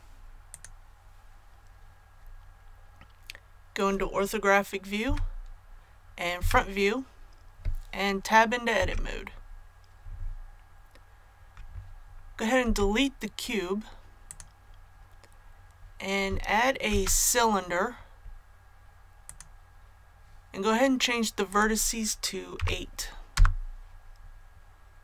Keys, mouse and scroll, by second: 5.0 KP_5, 6.3 KP_1, 8.7 Tab, 12.6 x, 14.2-15.2 drag, 16.8 shift+a, 19.2-20.2 drag, 22.5 KP_8, 23.3 Return.